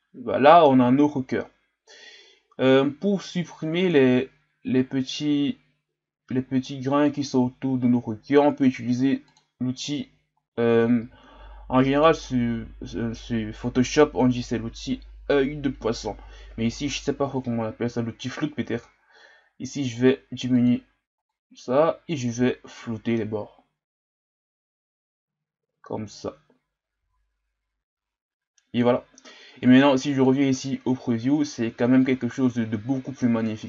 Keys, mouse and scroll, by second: 3.8 click, 9.4-11.0 drag, 11.0 f, 21.3-24.4 drag, 30.3-31.9 drag.